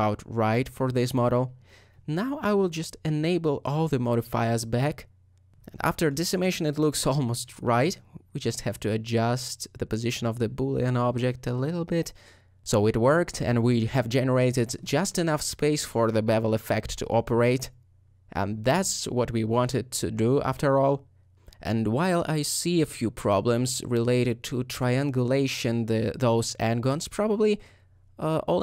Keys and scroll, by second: 9.8-10.7 typing, 12.7 shift+3, 21.8 ;, 24.4 alt+;, 24.7 alt+a.